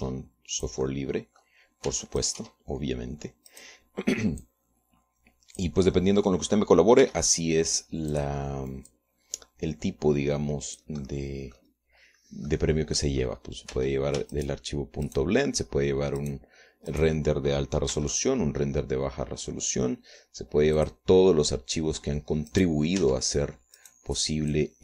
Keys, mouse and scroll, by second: 0.7 click, 1.5-3.1 drag, 3.1 middle click, 3.4 Tab, 3.8 right click, 4.1-5.1 middle drag, 5.1 click, 6.0-7.3 drag, 7.5 click, 8.6 r, 9.7 click, 10.5-12.5 drag, 12.6 click, 13.6 scroll down 2, 14.1 click, 14.9-15.5 scroll up 1, 15.3 Tab, 15.9 shift+click, 16.7 shift+click, 17.8 shift+click, 18.5 shift+right click, 19.5 shift+d, 22.3 click, 24.1 right click, 24.6 Tab.